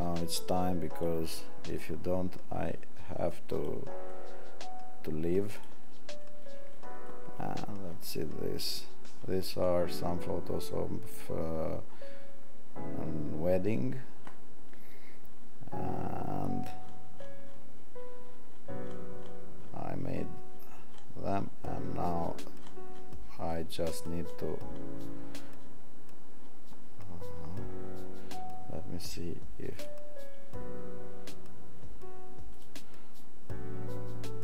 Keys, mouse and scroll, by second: 0.9 click.